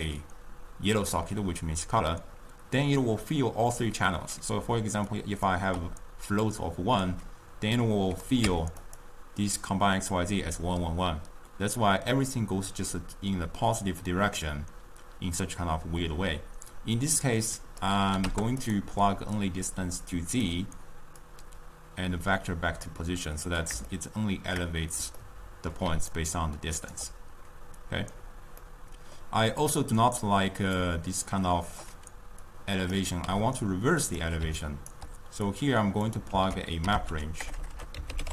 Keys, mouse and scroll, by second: 4.8 d, 5.2-5.5 drag, 5.5-5.8 d, 6.0 d, 8.0-9.3 drag, 17.6-19.0 drag, 19.6 click, 21.5 click, 24.1-26.0 shift+middle drag, 26.0 d, 26.3-27.3 right drag, 27.3 d, 28.8-29.8 middle drag, 29.8 click, 31.4-33.6 drag, 33.6 g, 34.8 right click, 35.0 d, 35.1 d, 35.8 click, 36.5 ctrl+a, 37.6 BackSpace, 37.8 BackSpace.